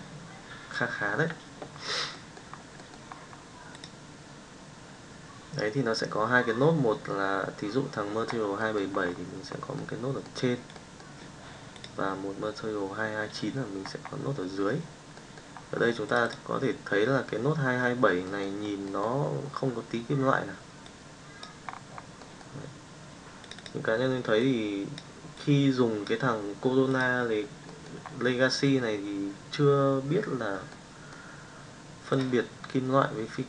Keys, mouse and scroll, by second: 9.8 middle click, 10.7 middle click, 18.2 middle click, 18.8 middle click.